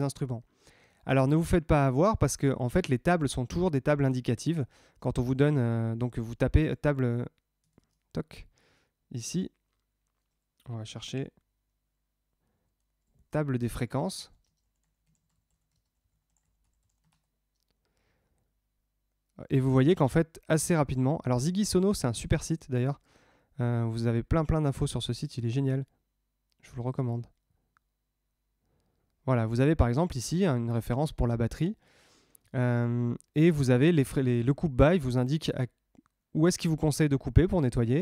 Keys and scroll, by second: 6.9 super+Tab, 13.9 space, 14.4 space, 15.7 space.